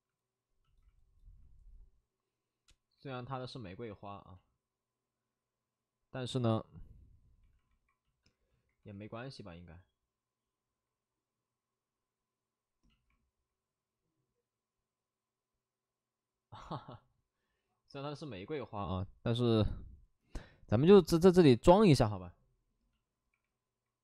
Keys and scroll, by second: 3.5 alt+s, 8.0 alt+s, 8.0 shift+f, 8.7 w.